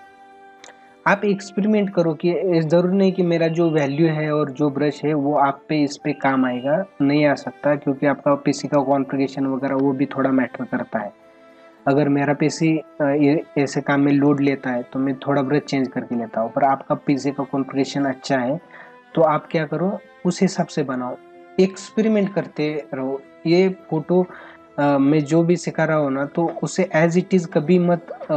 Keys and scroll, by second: 2.9 space, 9.7 ctrl+alt+z.